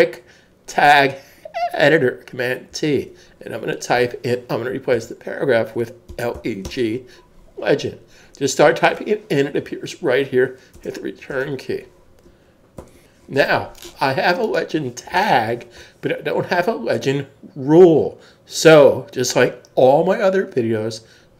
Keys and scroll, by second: 2.7 super+t, 6.3-6.7 typing, 8.0 typing, 10.7 Return, 12.8 super+s.